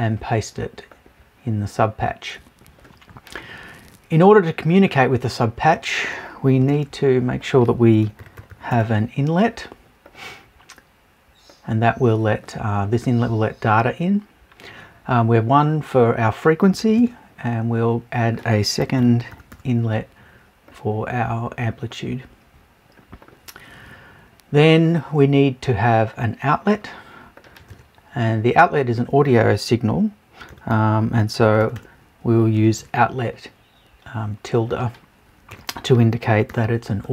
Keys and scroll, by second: 36.3 BackSpace.